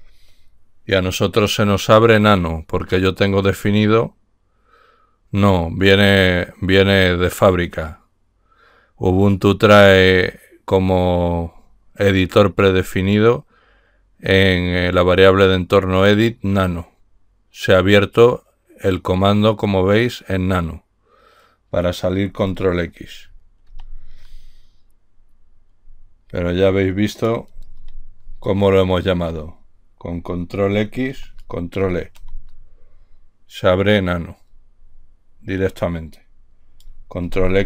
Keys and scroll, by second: 24.1 ctrl+x, 28.2 ctrl+l, 31.5 ctrl+x, 32.5 ctrl+e.